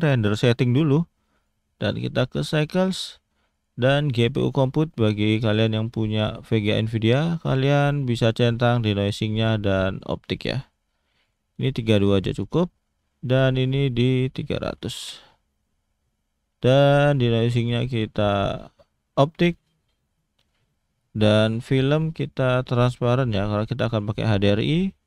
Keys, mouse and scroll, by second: 0.0 click, 1.3 click, 3.5 click, 5.6 click, 7.3-8.3 scroll down 3, 8.3 click, 8.7 click, 9.3 click, 10.6 click, 11.2 click, 13.1-13.6 scroll down 1, 13.6 click, 14.8 0, 16.3-16.7 scroll down 1, 16.9 click, 17.6 click, 19.5-21.2 scroll down 4, 21.2 click, 21.8 scroll down 1, 22.7 click, 23.9 click, 24.8-25.0 scroll down 3.